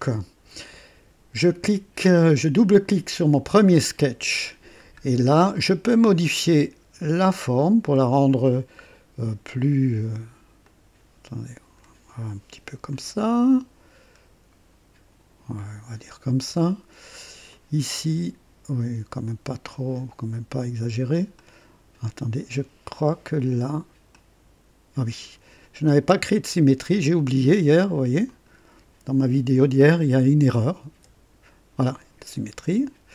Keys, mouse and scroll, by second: 2.7 click, 3.9-4.6 right drag, 4.8-5.2 scroll up 2, 7.3-9.4 drag, 10.6-11.9 drag, 12.8-15.8 drag, 17.4-19.9 drag, 21.3 click, 24.0-25.3 drag, 27.1 click, 28.2 click, 30.8 s.